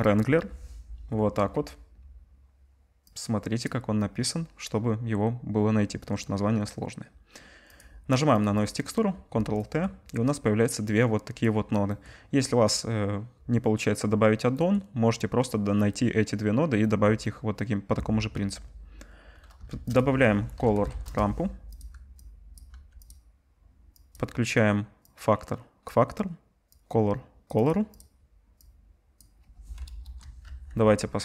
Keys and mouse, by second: 8.4 click, 8.6-10.8 ctrl+drag, 9.1 ctrl+t, 19.7 shift+a, 21.8 click, 22.7 g, 23.1 click, 24.1 click, 27.7 click, 28.0 click, 30.0 KP_0, 30.4 z.